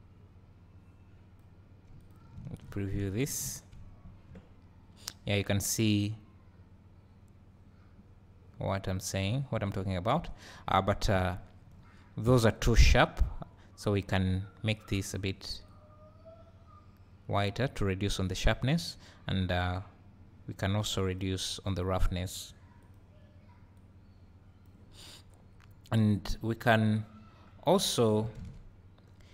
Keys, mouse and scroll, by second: 4.3 `, 9.4 middle click, 11.5 scroll up 2, 11.8 `, 15.1 click, 21.2 drag, 21.7-23.8 drag, 25.2 scroll down 1.